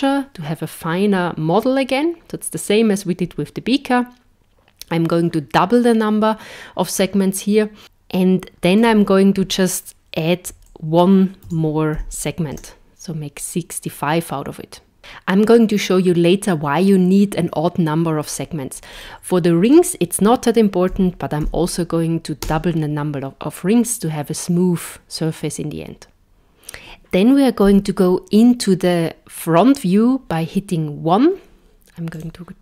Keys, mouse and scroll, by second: 8.8 click, 19.1 click, 20.0 click, 27.6 KP_1, 32.1 click.